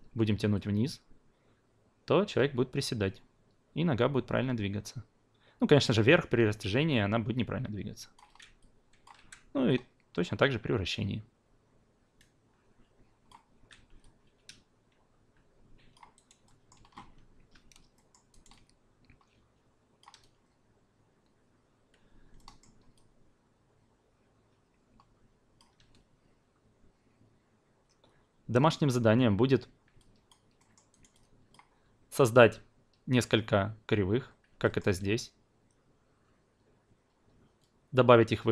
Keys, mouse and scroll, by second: 0.5-9.0 drag, 9.1 e, 9.6-13.3 drag, 13.5 ctrl+z, 14.0-15.9 alt+drag, 16.1 alt+right drag, 16.4 alt+middle drag, 17.9 alt+middle drag, 18.3 alt+right click, 18.5-20.0 alt+drag, 22.3 alt+middle click, 23.4-25.6 alt+drag, 30.0 alt+drag, 30.6 alt+middle click, 30.9 alt+right drag, 31.1-31.5 alt+drag, 32.1 alt+drag, 34.6 alt+middle drag.